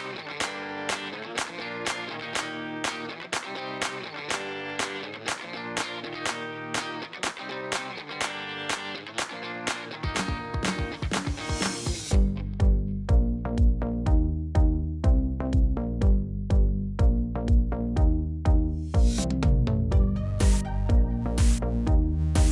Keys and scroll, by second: 2.4 2, 2.6 Return, 7.9 g, 9.0 shift+a, 9.8 e, 10.1 m, 10.3 i, 12.9 2, 13.1 Return, 14.8 alt+a.